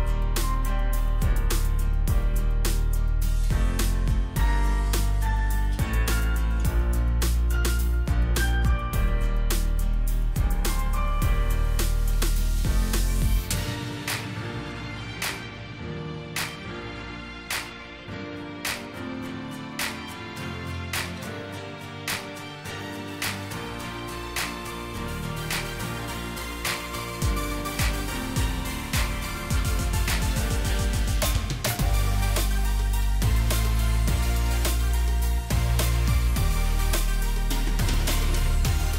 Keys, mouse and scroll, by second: 2.0 alt+click, 6.5 alt+shift+click, 12.4 shift+click, 14.1 double click, 18.4 Delete, 22.5 Left, 22.7 Left, 23.0 Left, 23.2 Left, 23.5 Left, 24.0 Left, 24.2 Left, 24.7 Left, 27.1 Right, 27.3 Right, 27.6 Right, 27.8 Right, 28.0 Right, 28.6 Right, 28.9 Right, 29.4 Right.